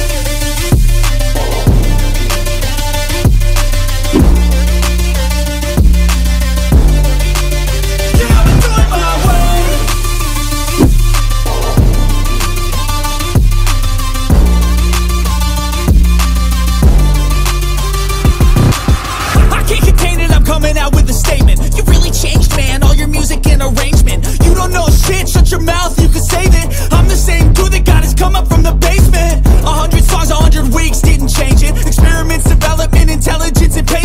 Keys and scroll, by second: 11.6 i, 14.7 s, 20.2 c, 26.8 ctrl+t.